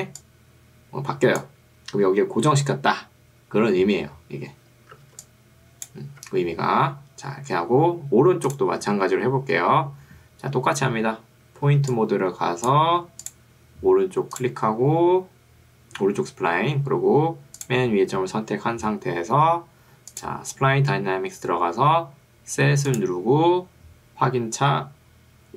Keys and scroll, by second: 4.0 Escape, 5.2 ctrl+2, 6.2 Escape, 11.8 ctrl+2, 13.0 Escape.